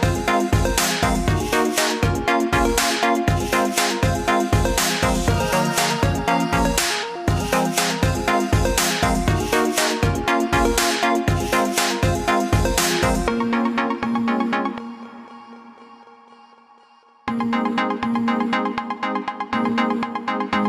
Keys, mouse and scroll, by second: 4.2 click, 18.7-19.6 scroll up 3, 19.6 click.